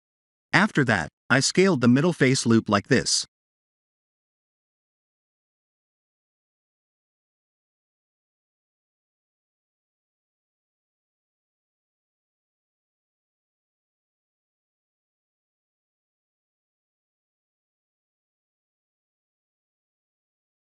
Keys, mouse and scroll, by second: 0.0 KP_7, 1.4 shift+click, 2.2 shift+click, 4.1 middle click, 5.4 s, 6.3 ctrl+z, 8.2 click, 9.0 s, 12.3 Tab, 12.8 middle click, 13.7 ctrl+3, 14.1 middle click, 15.2 ctrl+z, 15.6 middle click.